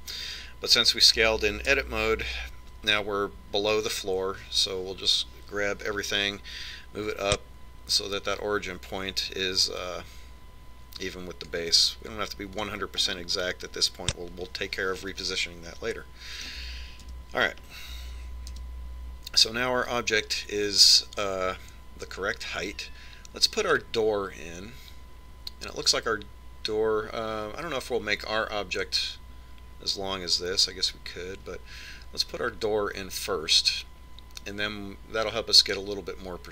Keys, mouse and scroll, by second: 1.3-3.0 middle drag, 3.2 KP_1, 7.3 click, 14.1 click, 14.5-16.4 middle drag, 16.7-18.6 middle drag, 18.6 a, 19.1-21.0 middle drag, 20.0 KP_1.